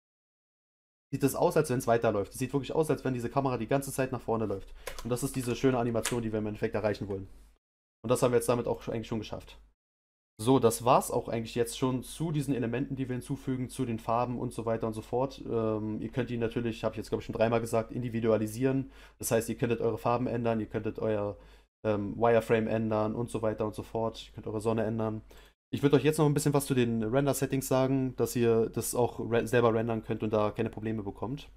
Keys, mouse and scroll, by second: 4.8 space, 5.4 Down, 8.6 click.